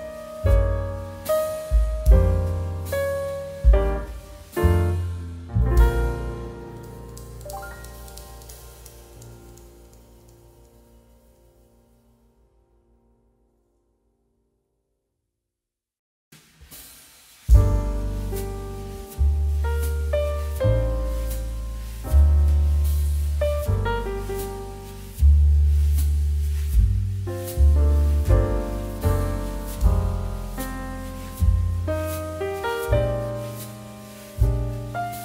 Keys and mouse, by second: 2.7 middle click, 2.9 g, 3.7 click, 3.9 middle click, 4.1 shift+middle click, 4.4 shift+middle click, 4.9 shift+middle click, 5.3 click, 5.5 shift+middle click, 6.0 middle click, 7.5 shift+middle click, 8.2 Tab, 8.4 click, 8.8 ctrl+z, 9.5 i, 11.5 click, 11.9 shift+middle click, 13.9 s, 15.5 i, 16.3 click, 16.8 s, 18.7 shift+z, 23.7 Tab, 24.3 middle click, 24.6 shift+middle click, 25.0 click, 26.5 shift+click, 28.0 ctrl+p, 28.3 click, 29.5 click.